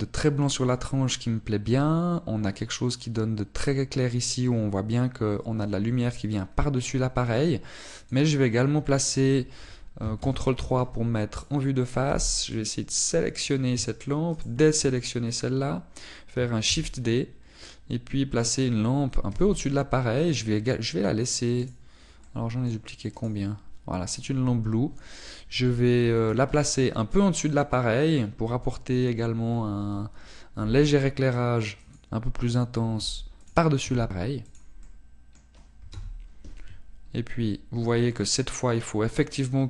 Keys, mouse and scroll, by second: 8.4 click, 9.7-11.2 scroll down 1, 11.2 ctrl+KP_3, 12.3 right click, 13.1 b, 15.4 shift+right click, 17.7 shift+d, 19.4 click, 20.3 r, 21.3 click, 22.6 right click, 23.2 middle click, 24.2 right click, 25.2 right click, 27.8 middle click, 31.6 g, 34.0 click, 34.0 g, 34.6 click, 35.0 r, 35.7 click, 35.9 middle click, 37.0 KP_0, 38.1 scroll up 1.